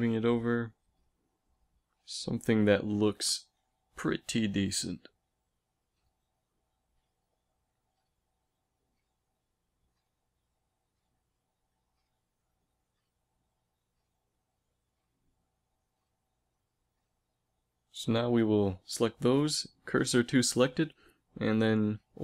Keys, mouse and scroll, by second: 0.3 a, 0.6 b, 1.2 z, 3.2 z, 3.7 b, 4.2 g, 5.4 a, 5.9 z, 8.4 Tab, 9.7 KP_1, 13.1 Tab, 14.6 a, 14.8 a, 15.4-17.6 drag, 17.6 shift+s, 18.0 click, 19.5 Tab, 20.8 ctrl+alt+shift+c.